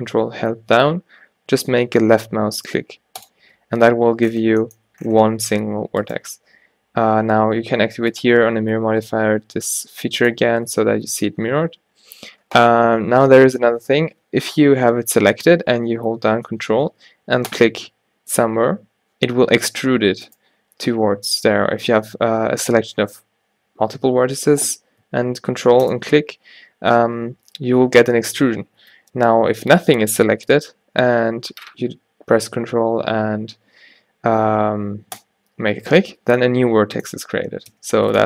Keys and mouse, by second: 3.4-4.5 drag, 5.6 g, 9.7 click, 9.7 g, 17.6-20.4 drag, 20.4-25.9 middle drag, 25.9-29.0 drag, 29.0 ctrl+z, 30.0 a, 35.2-38.2 drag, 37.8 x.